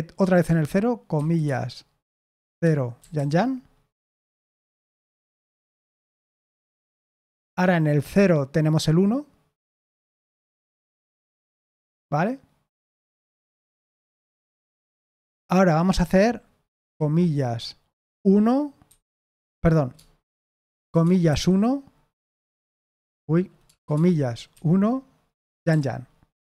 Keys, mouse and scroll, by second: 2.3-3.6 typing, 5.3-6.4 typing, 10.4 Escape, 11.5 k, 18.8 1, 19.4 Escape, 20.2-21.7 typing, 22.8 Escape, 23.0 Escape, 23.7 shift+', 25.5 typing.